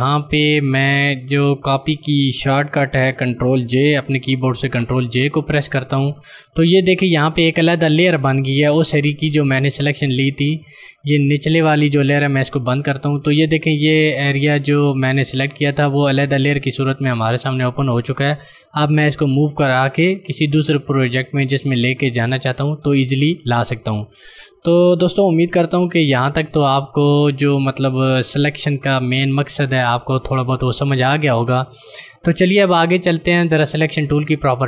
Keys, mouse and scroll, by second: 4.7 ctrl+j, 12.4 click, 19.0 click, 25.5 ctrl+alt+Num_Lock, 25.8 z.